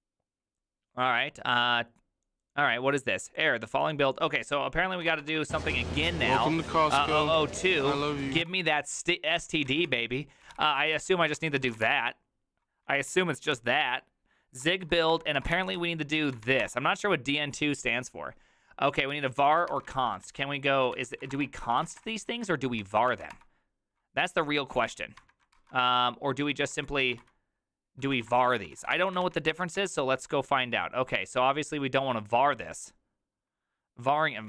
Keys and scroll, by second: 5.0 ctrl+a, 5.2 1, 5.9 ctrl+p, 6.7-7.8 typing, 7.9 Down, 8.2 Up, 8.5 Return, 9.3 ctrl+d, 9.4-13.1 typing, 12.9 ctrl+a, 13.5 Up, 14.6-16.9 typing, 19.4 ctrl+a, 19.7-22.8 typing, 19.9 ctrl+c, 23.1 Up, 23.3 Return, 24.8 ctrl+a, 25.2 1, 25.5 ctrl+c, 26.5-29.3 typing, 29.5 Up, 29.7 Return.